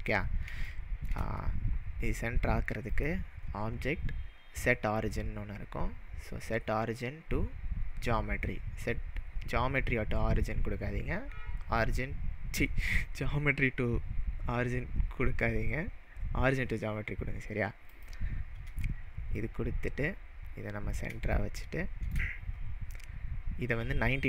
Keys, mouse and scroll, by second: 0.7-1.2 shift+middle drag, 2.9-5.9 drag, 17.8 click, 19.4 click, 19.6-21.2 drag, 21.4-22.2 shift+middle drag.